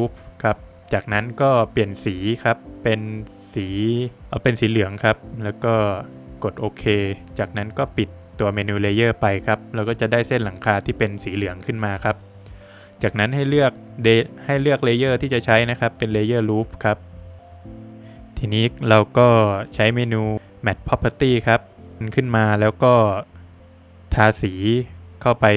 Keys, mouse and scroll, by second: 3.6 click, 9.7 click, 10.5 click, 11.7 click, 12.3 scroll up 1, 13.7 scroll down 2, 15.8 click, 16.7 middle click, 17.1 Escape, 17.6 space, 18.7 space, 18.8 click, 21.5 space, 21.9 click, 22.4 Delete, 23.0 middle click, 23.3 Escape, 23.6 scroll down 1, 24.6 Escape, 24.6 scroll down 1, 25.1 middle click.